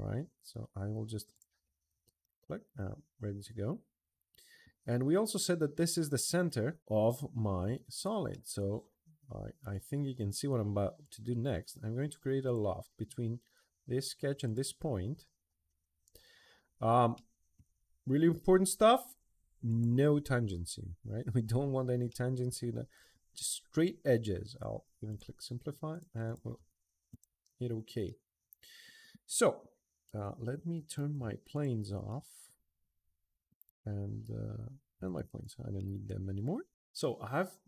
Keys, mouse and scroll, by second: 1.1 click, 2.0-3.0 middle drag, 3.5-4.4 middle drag, 5.9 click, 7.7 click, 8.1-9.4 middle drag, 10.8 click, 12.2 click, 14.2 click, 16.9 middle click, 17.6 middle click, 17.9 middle click, 19.4 click, 21.3 middle click, 21.9-22.9 middle drag, 24.9 click, 25.7 click, 26.0 click, 26.4 Escape, 26.7 middle drag, 26.9 click, 27.8-28.8 middle drag, 30.8 alt+3, 31.3 click, 31.8-33.3 middle drag, 34.7 alt+1, 35.2 click, 35.5-37.5 middle drag.